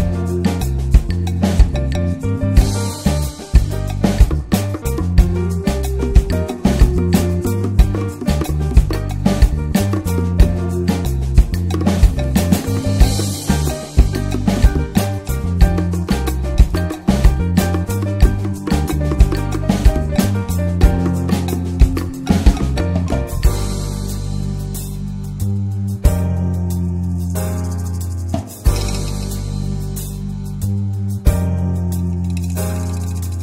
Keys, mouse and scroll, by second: 12.5 click, 12.6 scroll down 2, 13.0-15.0 middle drag, 15.0-18.4 drag, 23.8-24.3 middle drag, 24.3-24.7 scroll down 1, 24.9 alt+middle click, 26.7-28.4 drag, 28.4-30.8 middle drag, 30.8-31.9 drag, 31.9-33.4 middle drag.